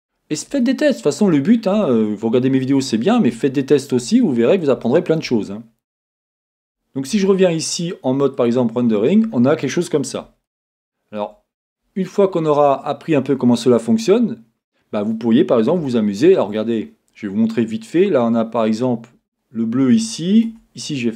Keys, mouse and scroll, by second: 1.4-1.9 scroll down 2, 3.0-3.4 scroll down 2, 5.4-6.6 scroll up 2, 6.6-7.6 scroll up 1, 9.0-9.7 scroll down 2, 12.8-15.9 scroll up 2, 19.2-20.5 scroll up 2, 20.5 Tab, 21.0-21.1 middle drag, 21.0-21.1 scroll up 2.